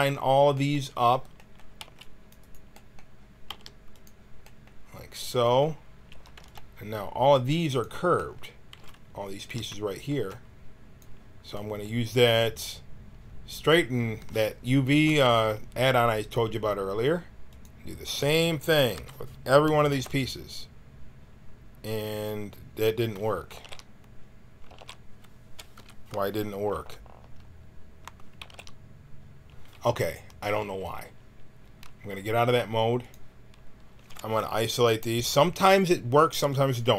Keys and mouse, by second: 1.7 c, 3.4 g, 6.0 a, 6.3 b, 8.7 g, 10.1 b, 18.9 l, 19.8 alt+e, 23.5 ctrl+z, 24.6 ctrl+z, 25.7 l, 26.7 alt+e, 28.4 ctrl+z, 34.0-35.4 drag.